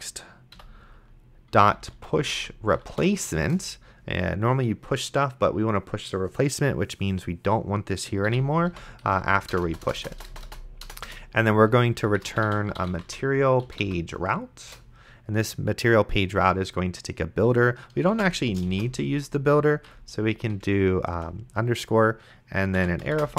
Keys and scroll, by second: 0.6 End, 1.3-3.5 typing, 3.5 Return, 8.5 End, 8.7 ;, 9.0 Left, 9.5 BackSpace, 11.1 Return, 12.1-13.8 typing, 14.7 Return, 18.4 shift+9, 19.0 shift+-, 19.9 Right, 21.1 space, 22.8 =.